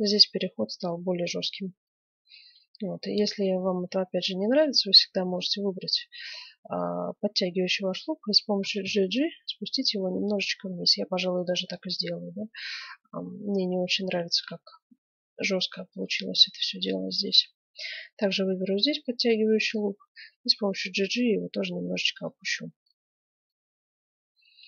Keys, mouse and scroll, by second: 0.4-0.8 scroll down 1, 0.8-2.2 middle drag, 2.2 Tab, 2.9 middle click, 3.5-6.0 right drag, 8.6 g, 11.8-13.4 middle drag, 14.2-16.8 middle drag, 15.3-18.3 right drag, 18.2-21.0 middle drag, 18.4 right click, 18.6 right click, 20.1 g, 22.4-24.1 middle drag, 24.1 Tab.